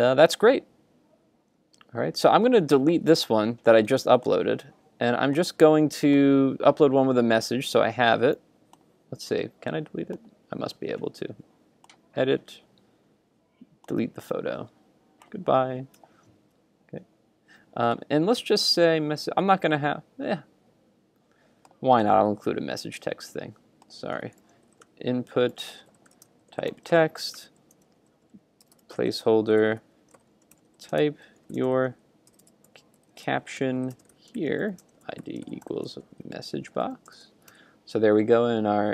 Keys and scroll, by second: 1.8 super+Tab, 16.0 super+Tab, 37.5 super+s.